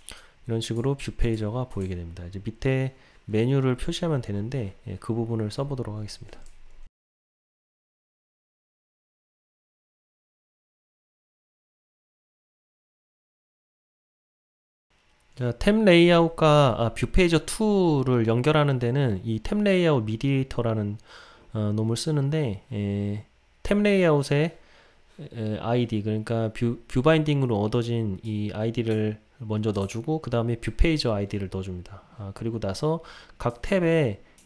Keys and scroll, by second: 8.4 Return, 12.7 Return, 14.7 Return.